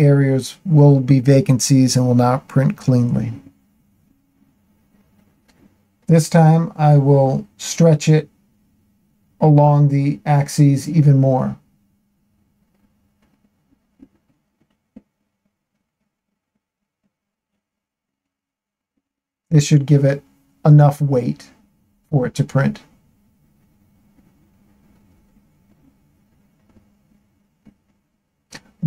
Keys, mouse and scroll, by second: 1.4 Tab, 3.4-5.2 shift+middle drag, 6.1-7.8 shift+middle drag, 9.2-11.4 drag, 12.9 s, 13.2 x, 17.3 click, 18.2-19.2 shift+middle drag, 19.8 Tab, 20.5 Tab, 22.2 q.